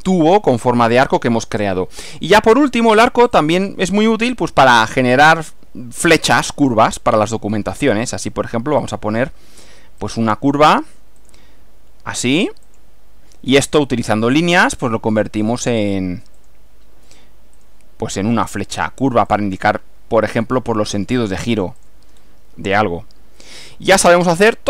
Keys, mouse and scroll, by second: 1.1 scroll down 2, 3.4 click, 6.2 scroll up 1, 8.9 click, 10.1 click, 11.3 click, 12.7 click, 14.1 click, 15.5 click, 16.4 click, 17.6 click, 19.3 click, 21.2 click, 21.8 click, 22.6 scroll down 1, 22.7-24.6 middle drag.